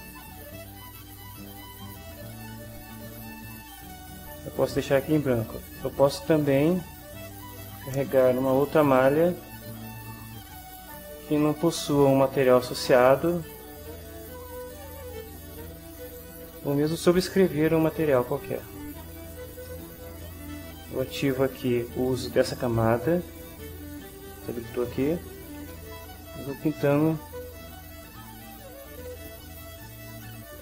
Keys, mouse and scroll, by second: 6.0 click, 7.2 click, 8.8 click, 11.4-12.8 drag, 13.2 click, 15.2 click, 16.2 click, 18.1 click, 19.7 ctrl+middle click, 22.7 click, 25.3-30.6 right drag.